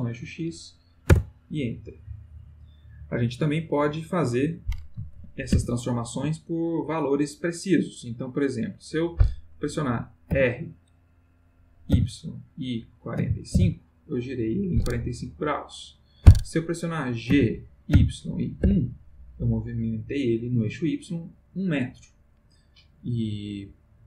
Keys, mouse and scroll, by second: 1.1 Return, 5.2 ctrl+z, 10.3 r, 11.9 y, 13.2 4, 13.5 5, 14.2 click, 17.3 g, 17.9 y, 18.6 1, 19.5 click.